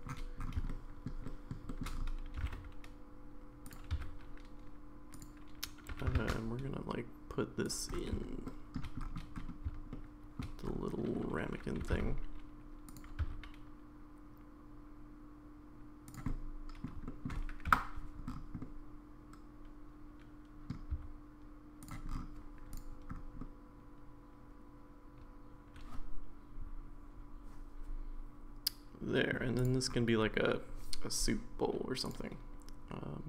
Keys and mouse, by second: 0.6 shift+g, 0.7 middle click, 1.2 middle click, 1.7 middle click, 2.4 g, 3.9 s, 5.9 g, 8.4-8.8 middle drag, 9.9-10.4 shift+middle drag, 11.8 r, 13.2 s, 16.3 middle click, 17.1 shift+middle click, 17.7 KP_Decimal, 18.6-20.7 middle drag, 20.9 s, 22.7 click, 23.4-29.3 middle drag, 32.1 click.